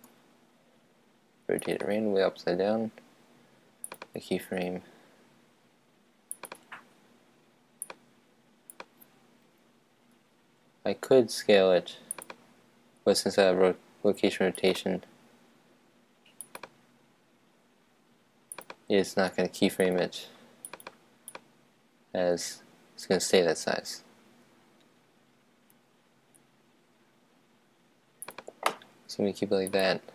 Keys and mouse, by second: 0.2 r, 1.9-3.8 drag, 4.0-5.8 drag, 6.6-8.0 right drag, 7.9 click, 8.0 middle click, 8.8 click, 10.3 s, 12.3-14.1 drag, 14.8-16.4 right drag, 16.6-18.3 right drag, 18.6 click, 19.7-22.0 drag, 22.0 right click, 22.5 click, 24.7 s, 25.9 s, 28.4-29.8 drag.